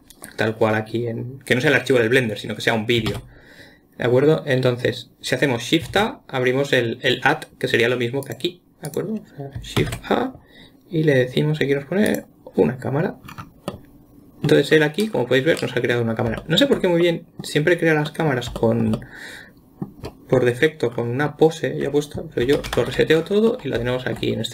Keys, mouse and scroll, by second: 3.5 shift+a, 6.3 shift+a, 8.6 click, 10.2 shift+a, 13.7-14.1 scroll down 3, 14.1-15.1 middle drag, 15.1-16.0 scroll up 1, 16.0-16.9 middle drag, 17.4-21.1 middle drag, 21.1-22.9 scroll up 3, 22.9 alt+s, 23.0 alt+r, 23.2 alt+g, 23.5-23.9 scroll down 1, 23.9-24.5 middle drag.